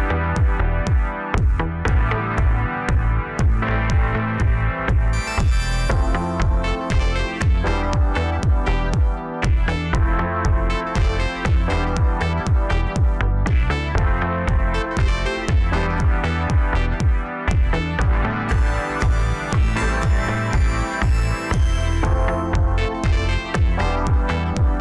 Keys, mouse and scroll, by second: 4.3 scroll up 1, 4.5 scroll down 4, 4.8-6.0 middle drag, 6.0 3, 6.5 click, 7.1 shift+click, 8.0 shift+click, 8.5 scroll up 2, 8.7 scroll down 3, 9.0-10.1 middle drag, 10.1 e, 12.5 Tab, 12.8-13.6 scroll down 2, 13.6 KP_1, 14.3-15.7 scroll up 1, 16.2 ctrl+a, 18.9 shift+d, 24.7 shift+click.